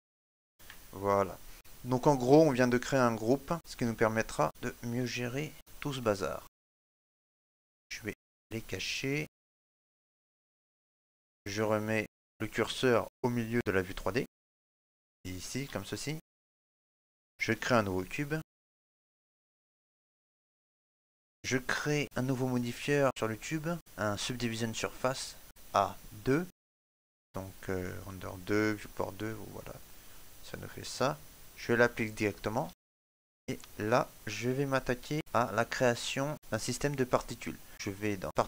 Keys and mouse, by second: 4.0 middle click, 4.5 right click, 5.1 shift+right click, 7.3 shift+middle click, 7.4 click, 7.4 middle click, 11.5 shift+middle click, 12.1 middle click, 12.2 click, 13.0 shift+s, 17.0 shift+middle click, 17.5 ctrl+middle click, 18.0 middle click, 19.0 shift+a, 20.9 shift+middle click, 21.1 click, 21.1 shift+KP_Decimal, 21.2 shift+middle click, 21.9 right click, 23.0 click, 31.2 middle click, 33.2 click, 34.0 shift+middle click, 34.3 middle click, 34.9 right click, 36.3 click.